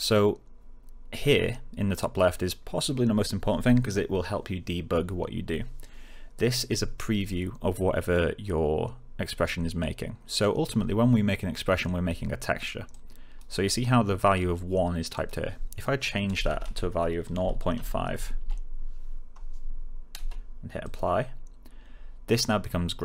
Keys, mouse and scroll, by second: 12.8-13.5 click, 17.3-18.6 typing, 20.8 click.